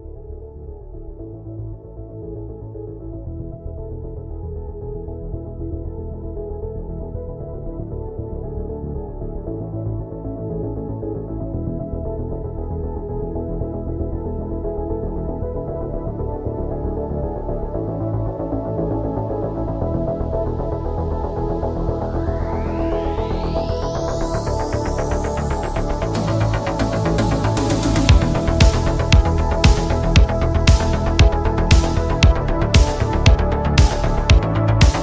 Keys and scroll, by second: 2.7 ctrl+z, 34.3 ctrl+z.